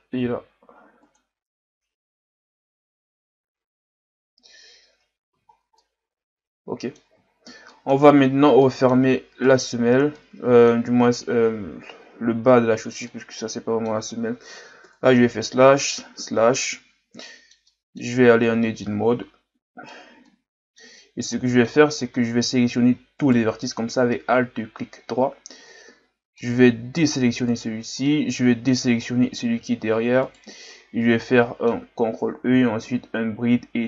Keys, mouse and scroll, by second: 0.2 s, 4.3-4.9 scroll down 2, 4.9 Tab, 5.3 a, 5.5 scroll down 1, 5.8-7.3 middle drag, 7.3-7.7 scroll down 3, 7.7 middle drag, 8.0-8.6 scroll up 2, 8.6-9.5 middle drag, 9.5 right click, 10.1-14.8 middle drag, 14.8 KP_Divide, 16.1 KP_Divide, 17.2-18.1 middle drag, 18.1-18.4 scroll up 1, 18.4 Tab, 18.8-23.2 middle drag, 23.2 alt+right click, 24.1-27.1 middle drag, 27.5 shift+right click, 28.0-30.2 middle drag, 30.2 shift+right click, 31.3-32.4 middle drag, 32.4 ctrl+e.